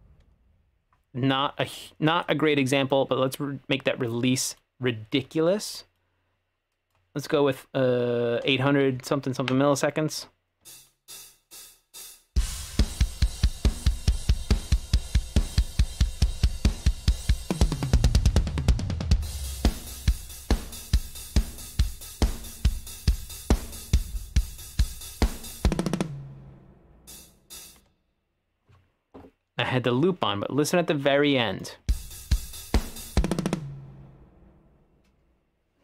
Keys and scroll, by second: 10.7 space, 27.8 space, 31.9 space.